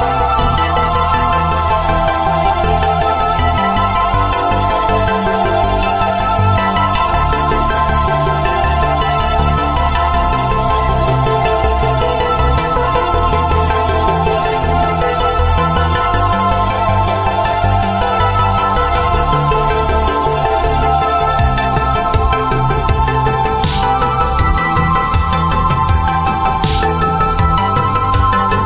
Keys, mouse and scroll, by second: 0.0 right click, 2.3 click, 13.6 click, 21.2 click.